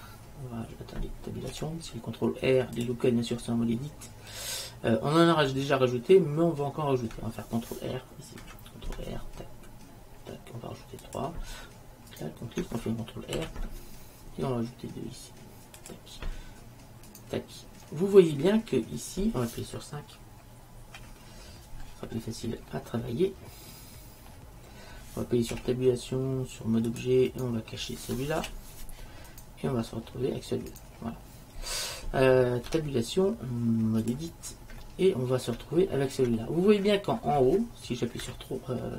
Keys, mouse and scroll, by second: 1.6 Tab, 5.7-7.6 middle drag, 8.5 ctrl+r, 12.4 click, 13.4 ctrl+r, 15.6 click, 17.9-19.1 middle drag, 21.1 KP_5, 25.6 Tab, 28.5 h, 29.5-30.9 middle drag, 32.8 Tab, 34.2 Tab, 34.9 middle click, 38.3 KP_3.